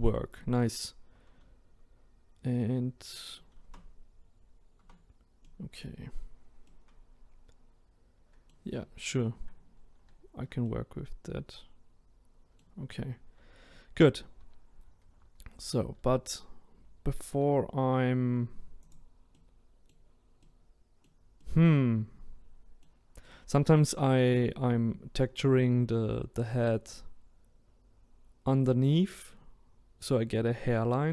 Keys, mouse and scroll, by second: 3.6 Tab, 4.8 Tab, 5.4 middle click, 6.2-6.8 scroll up 1, 6.9-14.0 middle drag, 14.0 ctrl+z, 14.4 ctrl+z, 15.1 ctrl+z, 15.4 ctrl+z, 15.8 ctrl+z, 16.9 ctrl+z, 17.4 ctrl+z, 18.9 click, 19.3-24.4 middle drag, 24.4 click, 25.0 scroll up 2.